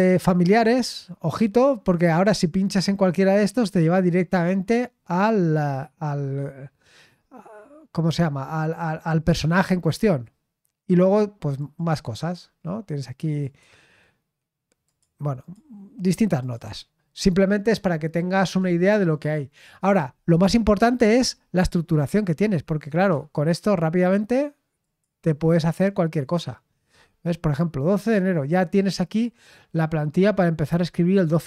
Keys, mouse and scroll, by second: 0.4 click, 9.1-10.1 scroll down 3, 11.5 click, 12.5-13.1 scroll down 1, 13.4 click, 14.8-15.8 drag, 16.4 click, 17.5-18.0 scroll up 1, 18.0-18.4 scroll down 1, 21.7-22.9 scroll up 1, 22.9 click, 24.8 click, 26.9-30.4 scroll up 2.